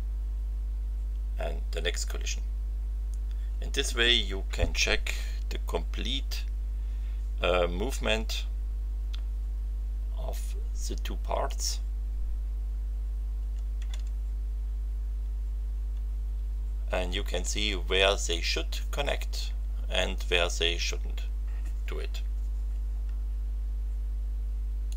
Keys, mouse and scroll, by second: 0.3 z, 10.1 v, 13.4 f, 15.2 v, 24.9 click.